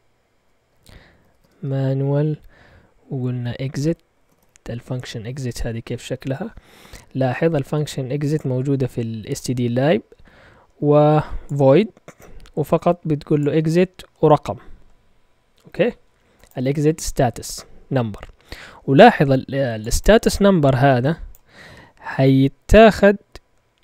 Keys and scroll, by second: 0.3 ctrl+Tab, 1.0-1.9 typing, 3.6-4.9 typing.